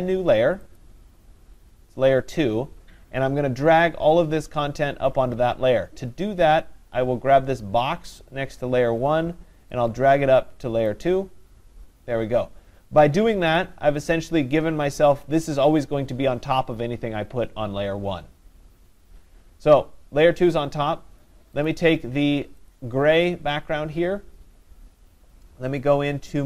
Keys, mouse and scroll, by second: 0.8 click, 10.9 click, 13.6 click, 14.1 click, 21.7 click, 22.7 click.